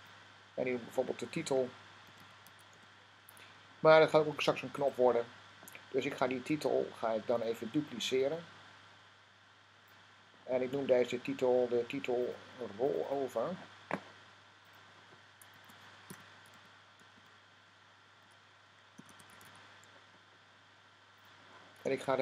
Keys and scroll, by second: 1.4-3.1 typing, 15.7-19.8 typing.